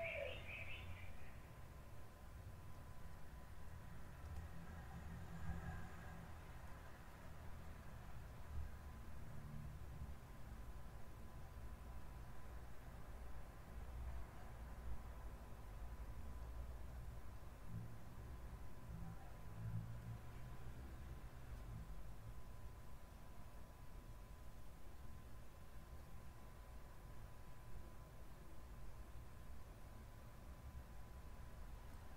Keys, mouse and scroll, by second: 2.6 Escape, 3.7 click, 4.3 space, 5.9 Escape, 6.7 click, 8.1 middle click, 9.0-10.1 middle drag, 10.2 middle click, 11.6 click, 12.0-13.5 middle drag, 13.7 middle click, 15.9 middle click, 16.4 middle click, 16.9 middle click, 17.4 middle click, 22.6 click, 27.0 click.